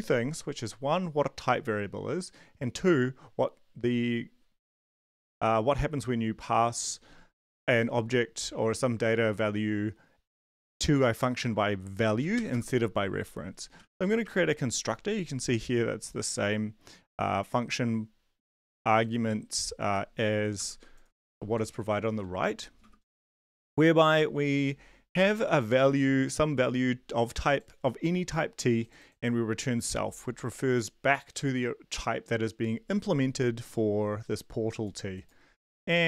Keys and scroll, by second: 12.1-14.7 typing, 20.5 ctrl+c, 21.4 ctrl+shift+Left, 21.6 ctrl+shift+Left, 22.0 ctrl+v, 23.1 {, 23.4 Return, 35.5 shift+Tab, 35.9-36.0 typing.